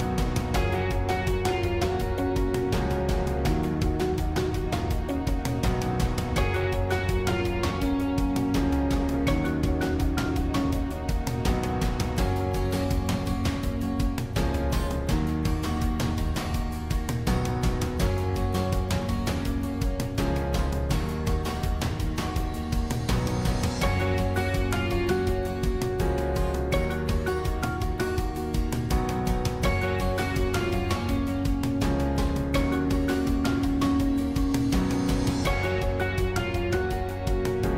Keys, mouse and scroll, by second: 1.7 click, 2.0-3.4 middle drag, 3.4-4.4 scroll up 1, 5.4 shift+click, 7.6 click, 8.7 g, 10.6 middle click, 11.1-11.6 scroll up 2, 11.6-13.4 middle drag, 13.4 click, 13.9 middle click, 14.5 g, 16.4 click, 16.7-19.1 middle drag, 19.1 click, 19.7-20.8 middle drag, 20.8 click, 21.3-22.3 middle drag, 22.3 g, 25.0-27.0 middle drag, 27.0 scroll down 2, 27.2-28.4 middle drag, 28.4 click, 29.7 g, 31.3-33.6 middle drag, 33.6 click, 34.9 click, 35.8 g, 37.6 click.